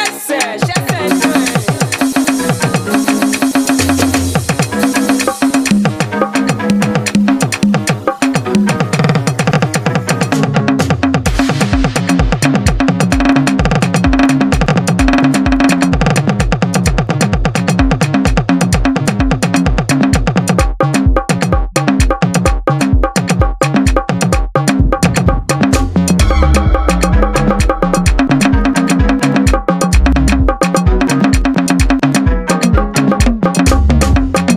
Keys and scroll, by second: 0.5-23.2 typing, 24.6-32.4 typing, 33.6 KP_4.